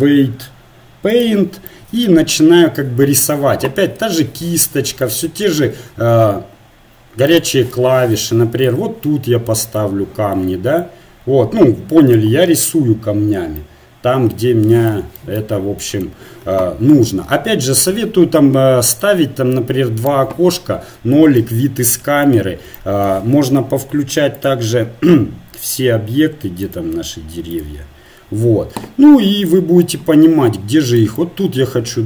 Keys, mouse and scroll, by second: 4.0 f, 5.5 shift+f, 7.9 middle click, 8.7 click, 9.7 middle click, 10.8-12.2 drag, 13.7 middle click, 13.8 middle click, 14.0 middle click, 14.5-16.8 middle drag, 17.9 n, 19.0-20.5 drag, 20.3 KP_0, 21.0-22.8 drag, 24.4-26.3 drag, 26.7-29.5 drag, 29.5-32.0 middle drag, 31.2-32.0 drag, 31.2-32.0 right drag.